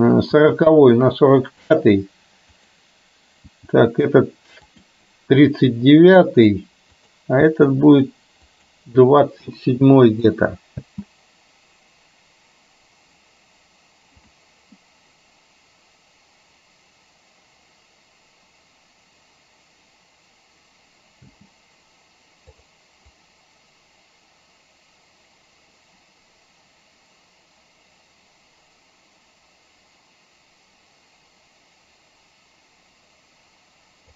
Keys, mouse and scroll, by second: 0.4 g, 2.6 click, 3.6 g, 7.1 click, 7.4 g, 10.3 click, 10.9 space, 21.3 space, 22.6 click, 23.2-34.1 drag.